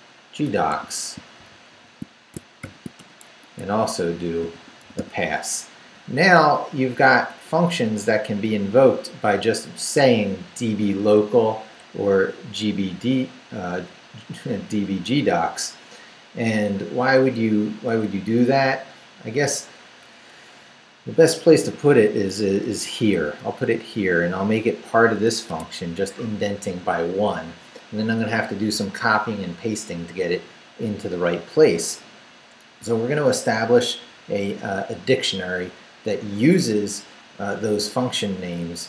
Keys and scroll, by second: 0.0-2.6 typing, 3.0 shift+Return, 3.4 Tab, 4.4 p, 6.9 Up, 8.2 Left, 9.5 Left, 10.3 Right, 11.2 Left, 11.9 Down, 12.6 Down, 14.1 Up, 17.9 Down, 20.1 Down, 21.5 i, 22.3 BackSpace, 22.6 Return, 23.1 Return, 23.6 Up, 25.5 Tab.